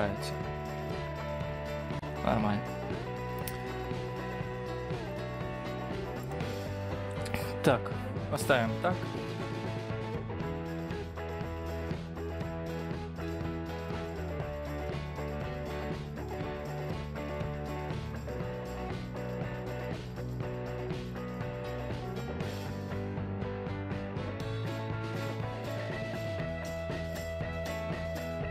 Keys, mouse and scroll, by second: 10.5 scroll down 3, 10.7-11.7 scroll up 2, 14.0 click, 14.5 Tab, 14.8 scroll down 4, 14.9 scroll up 4, 17.2 KP_1, 18.0 r, 19.5 KP_3, 21.9 middle click, 23.0-24.4 typing, 28.4-28.5 scroll down 3.